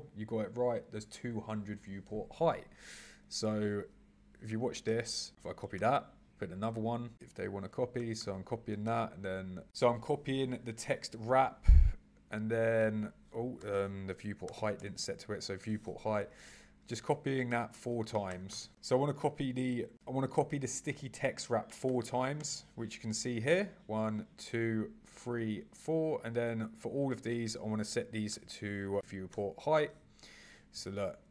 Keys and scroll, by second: 4.5 super+c, 4.8 super+v, 5.3 super+c, 5.7 super+v, 8.0 super+c, 8.8 super+v, 16.1 super+c, 16.3 super+v, 17.5 super+c, 17.7 super+v, 18.3 super+c, 18.5 super+v, 19.5 super+v, 21.8 super+v.